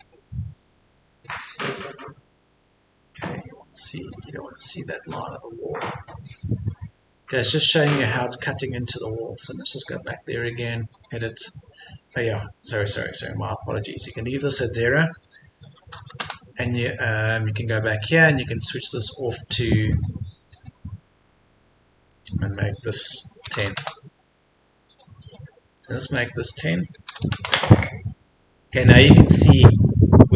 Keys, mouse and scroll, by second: 0.4-0.8 scroll up 1, 1.2 click, 2.6-3.1 scroll down 1, 4.1 click, 5.1 click, 5.7-6.2 scroll up 1, 6.2-7.3 middle drag, 9.8 click, 16.0 KP_0, 17.8 click, 23.4 KP_1, 24.9-27.0 drag, 27.0 KP_1.